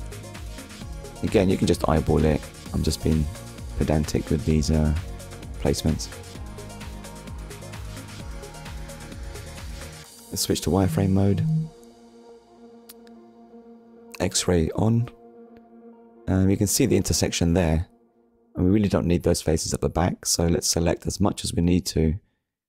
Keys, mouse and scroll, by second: 1.1 scroll up 1, 2.1 scroll down 1, 2.7 middle click, 3.5 z, 3.9 click, 4.4 middle click, 7.5 KP_3, 9.9 click, 10.8 scroll up 1, 12.3 click, 12.9 click, 14.5 click, 17.6 Tab, 19.3 click, 20.5 click.